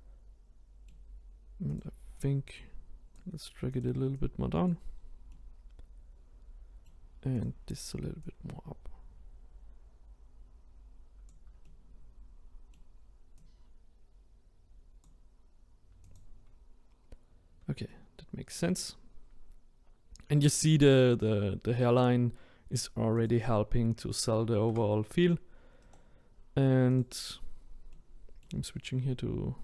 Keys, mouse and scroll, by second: 1.8 click, 2.2 click, 4.2 click, 4.9-5.3 scroll down 1, 5.3-7.4 middle drag, 7.4 click, 8.4 click, 11.6-13.4 middle drag, 13.4 click, 16.1 click, 17.9-19.4 middle drag, 19.4-22.4 scroll down 1, 23.2 click, 24.7 Tab, 27.0-27.9 right drag, 27.9-29.6 middle drag.